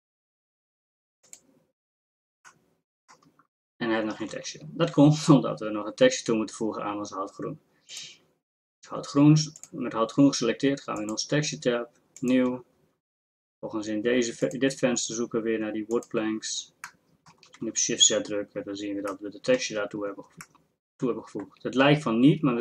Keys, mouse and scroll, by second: 4.3 shift+z, 17.6 shift+z.